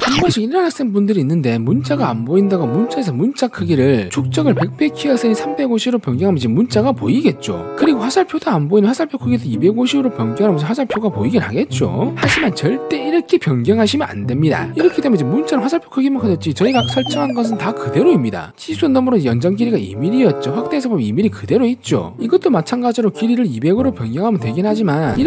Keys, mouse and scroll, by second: 2.6 click, 3.0 3, 3.3 5, 4.4 click, 4.9 click, 8.6 click, 8.7-9.6 typing, 10.7 click, 11.4 click, 12.5 scroll up 1, 13.1-14.8 scroll up 7, 14.9 w, 15.1 right click, 15.4 click, 15.8 click, 16.0 scroll down 2, 16.2 scroll up 1, 17.0 scroll down 1, 17.2-17.7 scroll up 2, 18.1 click, 18.3 scroll up 1, 18.7 scroll down 1.